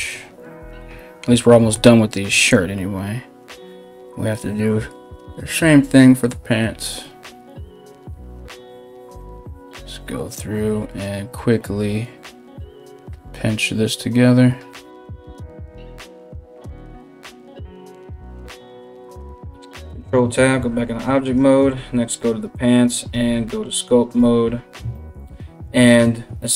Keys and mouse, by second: 1.9 ], 2.1 ], 2.3 ], 18.9 KP_1, 19.4 ctrl+Tab, 20.8 right click, 22.7 ctrl+Tab.